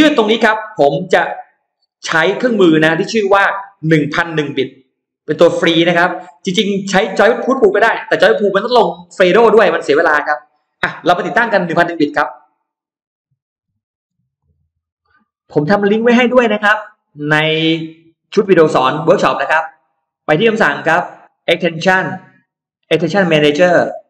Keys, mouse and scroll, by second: 13.6 F9, 14.2 click, 19.1 click, 21.1 click, 22.8 click.